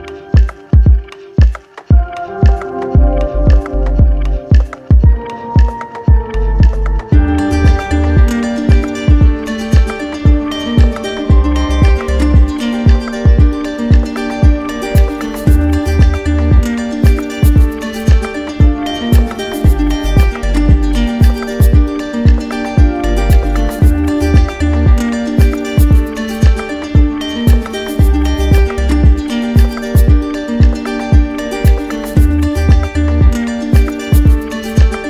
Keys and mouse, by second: 1.0 right click, 5.5 alt+right click, 6.1 ctrl+z, 7.6 right click, 8.6 right click, 12.6-13.8 drag, 15.0-17.1 drag, 17.4 right click, 18.4 right click, 22.0 alt+click, 23.6 alt+click, 23.8-26.4 right drag, 26.9 alt+click, 29.0 alt+click, 29.8 shift+click, 30.7 alt+click, 33.0 shift+click, 34.2 right click.